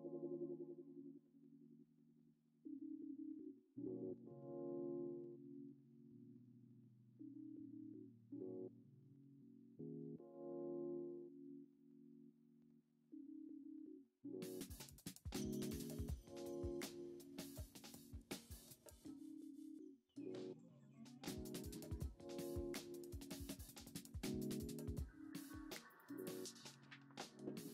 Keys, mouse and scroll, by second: 0.8-2.3 drag, 5.0-6.6 middle drag, 7.3-8.9 drag, 9.8-11.3 middle drag, 17.9-19.5 drag, 24.7-26.2 shift+middle drag, 27.3-27.7 drag.